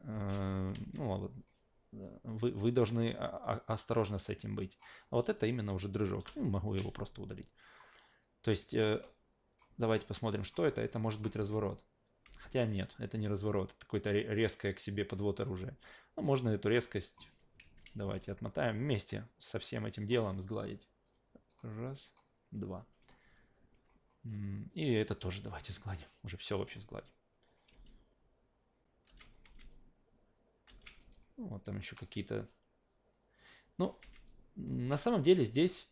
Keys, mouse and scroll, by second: 0.8 ctrl+z, 1.4 click, 2.1-4.8 drag, 5.6 click, 6.2 Delete, 8.2-9.6 drag, 9.8-10.5 alt+drag, 10.8 alt+middle drag, 11.0 alt+right drag, 11.3 alt+v, 12.2 alt+v, 12.8-15.4 drag, 15.9 click, 17.6 ctrl+z, 17.9 ctrl+z, 18.1 ctrl+z, 18.9-20.1 drag, 21.0 click, 21.5 click, 22.0 click, 23.0 click, 23.9 alt+middle click, 24.7 click, 26.0 click, 26.7 click, 27.5 click, 27.7 alt+v, 29.1 alt+v, 29.3 alt+click, 29.5 alt+v, 30.7 alt+v, 31.1-31.6 alt+right drag, 32.5-33.8 drag, 34.0 alt+v, 34.7 alt+v, 35.2-35.9 drag.